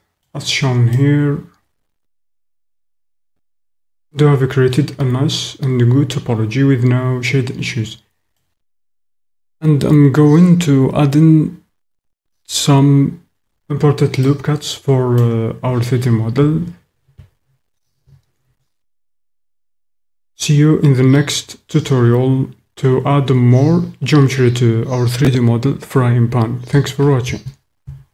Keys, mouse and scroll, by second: 0.0 click, 1.1 middle click, 1.7 middle click, 2.9-4.7 middle drag, 5.4-6.4 middle drag, 6.4-8.3 drag, 8.5 drag, 14.3 click.